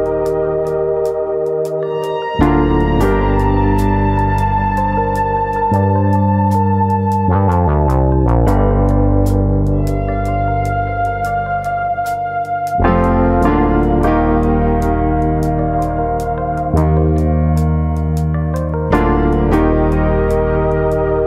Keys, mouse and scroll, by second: 0.1 middle click, 2.0-2.3 scroll up 5, 2.3 middle click, 2.6 Tab, 3.0 Tab, 3.2 click, 3.3 Tab, 3.5 middle click, 4.3 1, 4.4 click, 4.6 middle click, 5.3 click, 5.6 middle click, 6.1 click, 8.7-9.9 scroll down 4, 9.0 middle click, 9.2 Tab, 9.6 middle click, 10.2 shift+middle click, 10.9 middle click, 13.5 middle click, 14.0 click, 14.2 Tab, 14.6 middle click, 14.9-16.0 scroll up 3, 18.3 click.